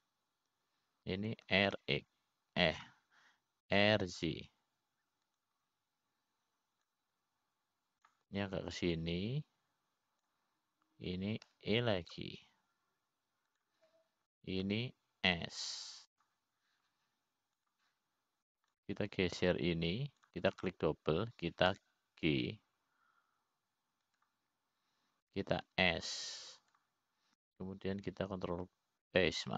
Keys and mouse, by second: 0.0 e, 4.0 r, 6.2 r, 9.6-10.7 drag, 11.5-12.9 drag, 14.1 e, 17.2 s, 20.2 click, 21.3 click, 22.7 click, 23.0 click, 24.4 g, 28.4 s.